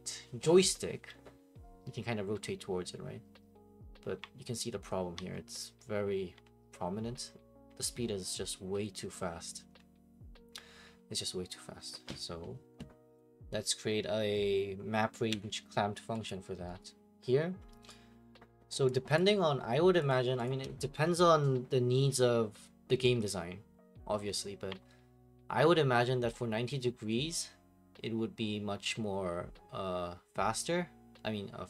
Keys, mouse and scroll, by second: 15.3 Escape, 16.3 click, 16.8 right click, 17.9 right click, 19.2 right click, 20.1 click, 20.5 click.